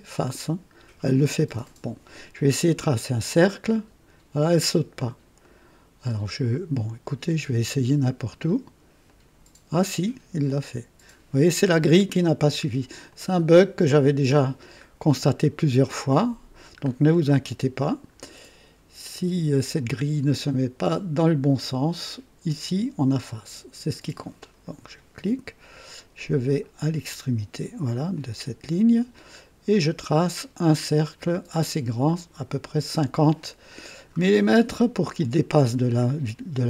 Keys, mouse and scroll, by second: 3.3 click, 5.4 click, 6.7 click, 7.5 click, 9.0 click, 13.1 click, 15.2-15.7 scroll up 2, 16.1 right click, 16.8 scroll up 2, 17.4 right click, 17.4 click, 24.2 click, 28.1 click, 29.3-29.8 scroll down 2, 32.4 click, 34.6 KP_3.